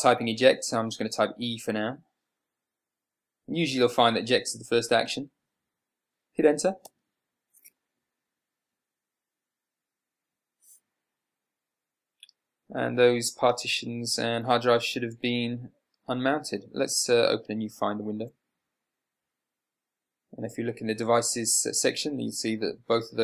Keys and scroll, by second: 2.3 e, 7.3 Return, 18.5 super+n.